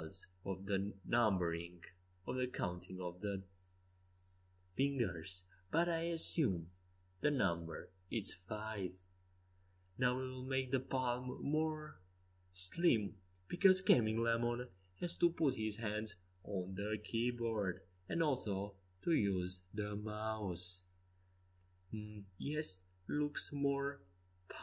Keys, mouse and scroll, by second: 3.5 KP_3, 5.1 KP_1, 6.9 s, 7.4 x, 7.7 z, 9.1 s, 13.7 middle click, 14.9 KP_3, 16.8 middle click, 17.8 middle click, 19.3 Tab, 20.7 middle click.